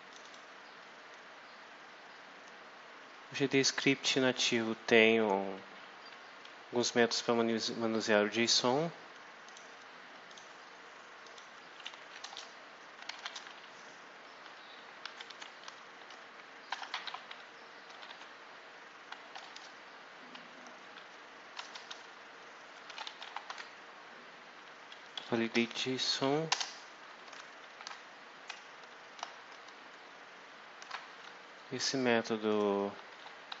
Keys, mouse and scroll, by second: 0.0 click, 9.4 click, 10.2 click, 11.1 click, 12.2 Return, 12.6-13.5 typing, 14.7-19.2 typing, 21.4 BackSpace, 22.5-23.9 typing, 25.4 Down, 26.0 Up, 26.4 Return, 27.5 shift+9, 30.7 shift+0, 32.4 click, 32.8-33.6 typing.